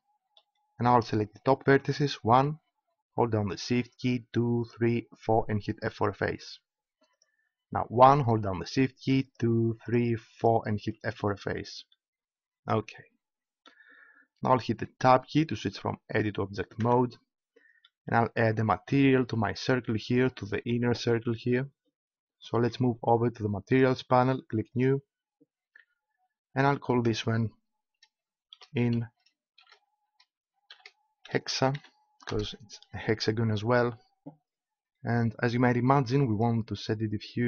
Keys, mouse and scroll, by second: 1.7-9.1 right drag, 6.0 f, 9.5 right click, 11.1 f, 16.8 Tab, 23.6-28.6 drag, 36.3-37.4 drag.